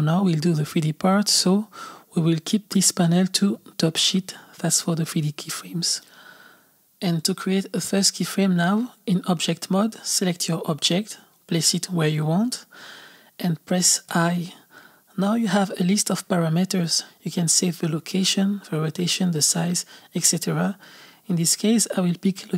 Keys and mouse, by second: 2.0 click, 2.8-6.1 drag, 9.1-10.9 drag, 10.9 g.